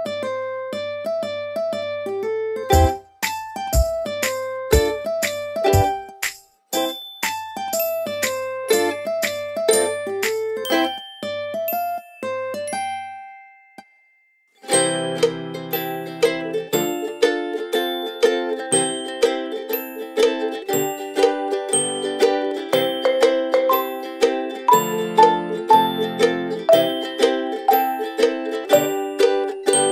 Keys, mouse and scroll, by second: 0.3 space, 0.3 click, 0.8 space, 1.4 scroll up 1, 1.7 click, 3.3 space, 3.5 click, 3.8 space, 4.1 click, 10.4 ctrl+a, 11.7 Return, 13.5 click, 14.0-15.1 scroll up 1, 15.1 click, 18.6 scroll down 1, 19.5 click, 20.3 click, 22.6 0, 24.6 click.